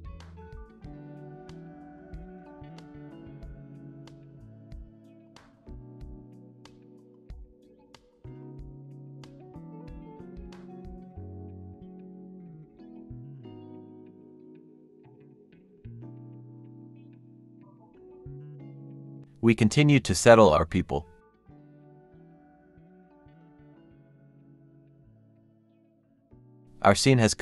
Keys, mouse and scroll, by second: 0.3 scroll up 1, 0.4 shift+click, 0.8 shift+click, 1.0 scroll down 1, 1.0-4.4 typing, 4.9 shift+click, 5.1 shift+click, 5.4 shift+click, 6.0 shift+scroll down 1, 6.1-14.8 typing, 8.9 scroll up 1, 9.3 shift+click, 9.4 scroll down 1, 10.2 scroll down 1, 13.1 scroll down 1, 16.6 scroll up 1, 16.8-20.2 typing, 16.9 scroll down 1, 21.5 scroll down 1, 21.7 typing, 22.7 shift+click, 23.0-24.2 typing, 25.9 double click.